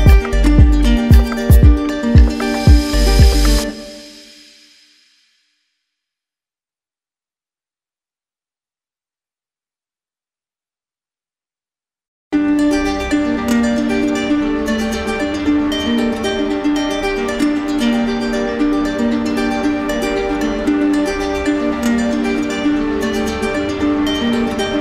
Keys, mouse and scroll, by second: 0.5 click, 1.1 ctrl+z, 2.2 right click, 4.2 click, 5.0 right click, 5.3 right click, 6.9-9.9 drag, 11.6-13.3 drag, 13.5-14.5 drag, 17.9 right click, 18.4 right click, 18.9 click, 19.9 right click, 20.1 right click, 20.5 ctrl+d, 21.1 ctrl+d, 21.7 right click, 22.1 shift+right click, 22.6 right click, 23.1 alt+right click.